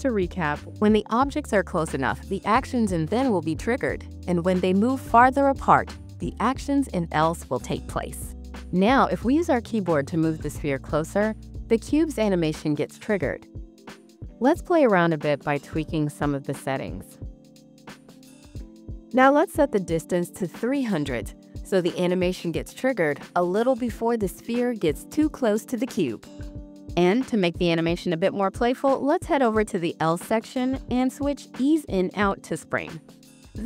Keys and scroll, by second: 10.4 w, 12.6 s, 13.8 a, 14.6 d, 15.0 w, 16.6 s, 17.9 d.